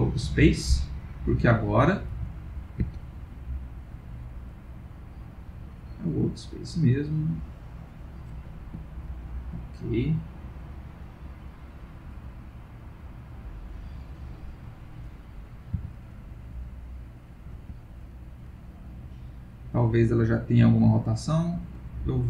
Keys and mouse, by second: 1.1 click, 1.7 click, 2.1 r, 3.5 click, 4.5 click, 6.7 middle click, 7.8 click, 12.8 click, 14.6 click, 15.8 click, 15.8 r, 18.0 click, 19.7 middle click, 22.1 middle click.